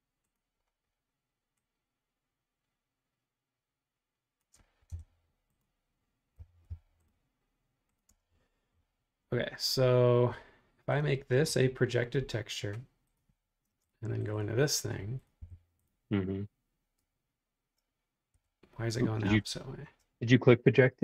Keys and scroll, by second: 4.9 Return, 6.1-8.1 typing, 13.7 space, 15.4 b, 18.3 Escape, 18.9 space.